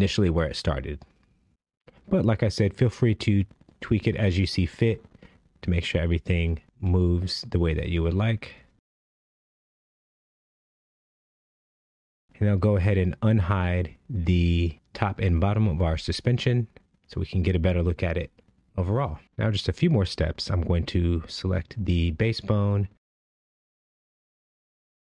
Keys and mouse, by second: 0.9-1.3 middle drag, 2.5 space, 4.7-5.7 middle drag, 6.2 KP_1, 6.2 KP_4, 6.7 KP_1, 14.1 space, 15.2 click, 16.8 click, 17.5 click.